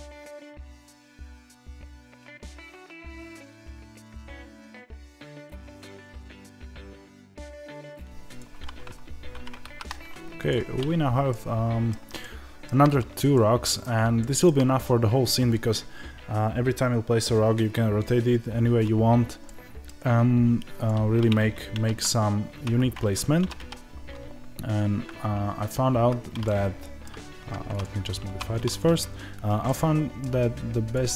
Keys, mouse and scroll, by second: 6.3-7.7 middle drag, 6.4 scroll down 1, 6.7 KP_Divide, 7.1 g, 7.7 click, 10.4 click, 11.2-20.8 middle drag, 20.0-20.8 scroll up 1, 20.8 click, 26.3-28.2 middle drag, 27.3 Tab, 28.2 1, 28.7 click, 29.5-30.8 middle drag, 30.8 click.